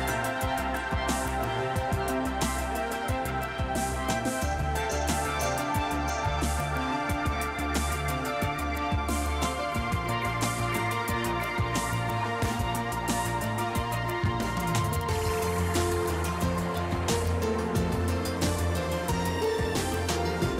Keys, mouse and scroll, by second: 0.4 click, 2.3 click, 5.5-6.1 drag, 6.5 click, 12.3 click, 14.0 click, 15.1 click, 16.9-20.0 drag.